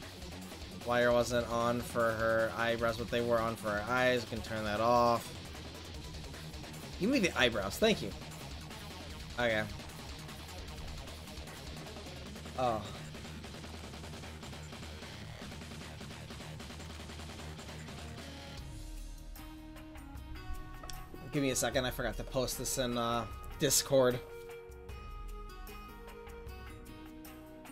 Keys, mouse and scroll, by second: 8.5 ctrl+s.